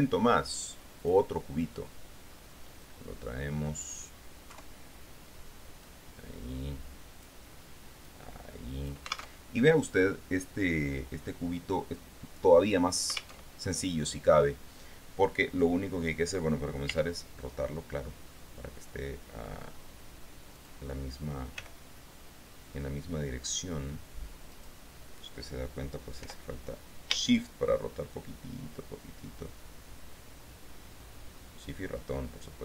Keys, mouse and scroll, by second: 1.2 click, 3.0-4.7 drag, 4.7 KP_3, 6.0-8.1 drag, 8.2-9.6 drag, 9.6 alt+Tab, 13.7 alt+Tab, 17.1 r, 20.7 click, 21.7 g, 24.7 click, 26.4 r.